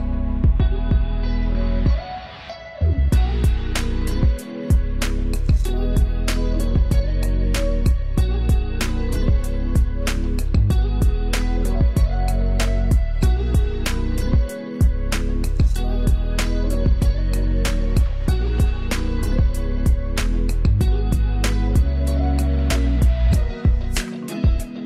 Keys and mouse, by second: 0.2 Up, 1.0 Down, 3.5 Up, 4.2 Down, 8.0 Up, 8.5 Down, 10.7-17.1 drag, 20.2 click, 21.8 Up.